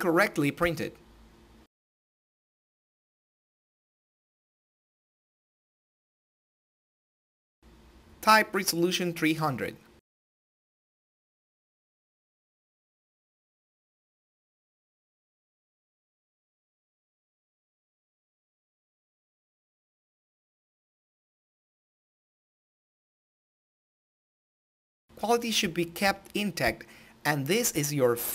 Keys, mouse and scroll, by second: 3.7 click, 3.9 ctrl+alt+i, 9.9-12.4 drag, 12.6 Tab, 13.4 click, 17.2 Tab, 18.8 click, 24.8-27.7 drag.